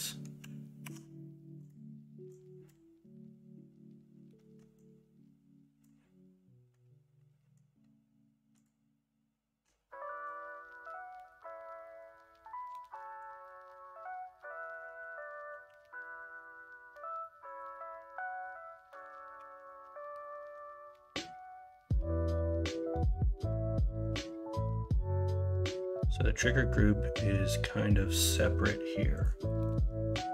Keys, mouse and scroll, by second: 15.6 ctrl+r, 19.3 2.